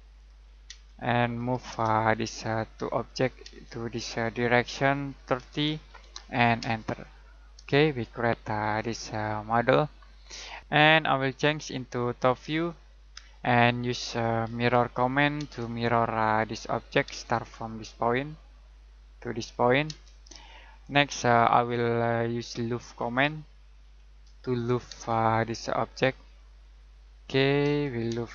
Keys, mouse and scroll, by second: 0.0 click, 0.6 space, 1.3 m, 1.7 space, 3.4 space, 3.6 click, 5.1-6.6 typing, 7.4 scroll down 1, 7.7 middle click, 10.6 click, 14.4 m, 15.4 space, 17.0 space, 18.7 click, 19.8 space, 20.5 shift+middle click, 22.7-24.9 typing, 26.2 click, 27.6 space.